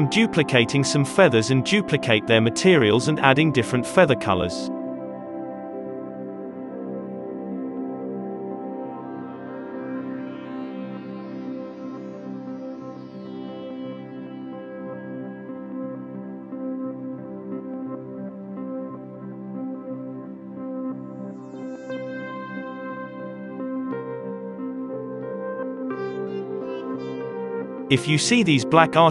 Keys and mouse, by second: 1.3 click, 1.5 KP_Divide, 1.6 z, 3.2 Delete, 3.8-5.9 drag, 5.9-7.3 right drag, 7.3-10.6 drag, 8.5 alt+a, 12.4 click, 13.0 KP_Divide, 13.6 alt+a, 14.3 click, 15.0 middle click, 15.1-16.9 right drag, 16.9-20.0 drag, 17.9 n, 18.0 alt+a, 24.7 alt+a, 24.7-25.7 drag, 27.2-29.1 drag, 27.2 z.